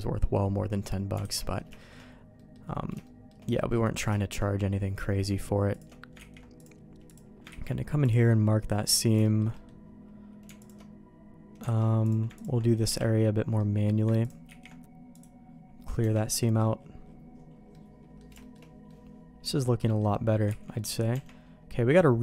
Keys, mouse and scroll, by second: 0.7 middle click, 1.2 alt+a, 1.4 middle click, 1.8 shift+middle click, 2.4 middle click, 3.0 middle click, 3.5 middle click, 4.1 shift+middle click, 4.8 middle click, 6.5 ctrl+e, 7.1 click, 7.5 ctrl+e, 8.8 middle click, 9.2 middle click, 9.3 click, 9.5 middle click, 11.7 alt+a, 12.0 click, 12.9 KP_Decimal, 13.6 middle click, 14.5 ctrl+e, 16.0 Tab, 16.4 middle click, 17.7 middle click, 18.4 shift+middle click, 18.9-20.0 middle drag, 20.5 ctrl+s, 20.7 middle click, 21.1 Tab, 22.1 middle click.